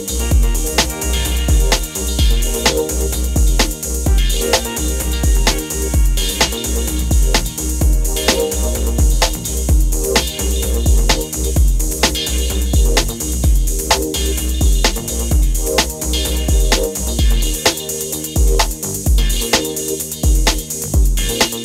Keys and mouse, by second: 1.1-5.0 drag, 5.4-7.3 drag, 11.3 middle drag, 14.2-17.3 drag, 17.3 drag.